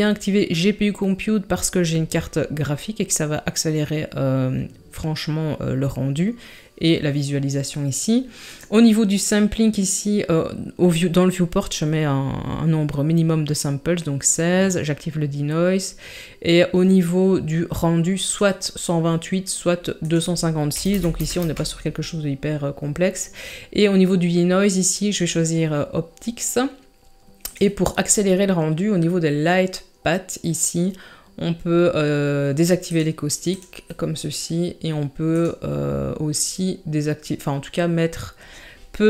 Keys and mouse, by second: 8.5 click, 18.4-19.4 drag, 20.0-21.4 drag, 27.5 click, 32.9 click, 33.5 click, 35.3-39.0 drag.